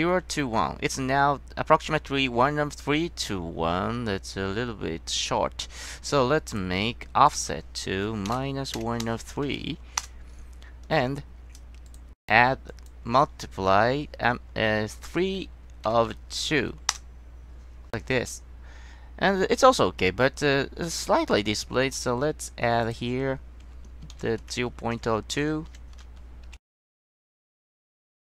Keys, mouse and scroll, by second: 6.6 click, 7.4 drag, 12.0 click, 12.8 drag, 15.2 KP_1, 23.0 click, 23.9-25.8 typing, 24.9 Left, 25.5 Left, 27.2 KP_0, 27.8 Return.